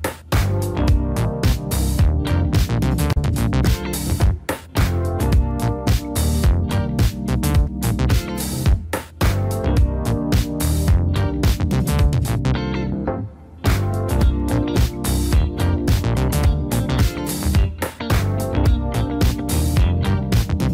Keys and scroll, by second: 7.4-11.1 typing, 12.0 Up, 12.4 Up, 12.6 Up, 12.8 Up, 13.1 Down, 13.3-13.7 typing, 14.6 Down, 14.8-16.4 typing, 14.9 Up, 17.4 typing, 18.4-20.6 typing.